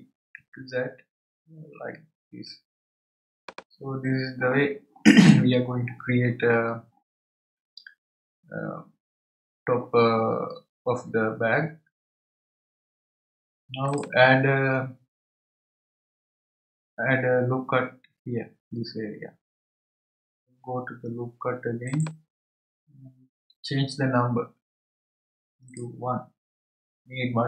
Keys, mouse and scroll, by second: 1.4 g, 13.9 click, 21.9-25.0 drag, 25.7-27.4 drag.